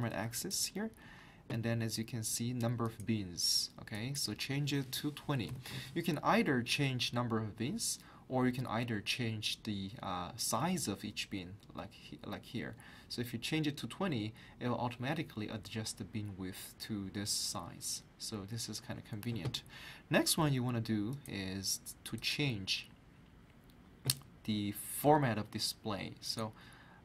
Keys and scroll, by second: 5.2-6.0 typing.